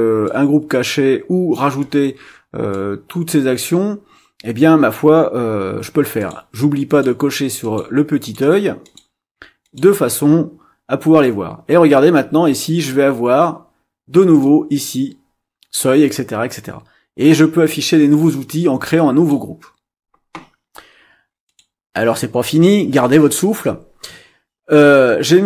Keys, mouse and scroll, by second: 0.2-1.7 drag, 2.7-3.7 drag, 6.2 click, 6.9 click, 7.6 click, 8.2 click, 8.8 click, 9.6 click, 14.4-19.5 drag, 21.5 click, 24.7-25.4 scroll up 4.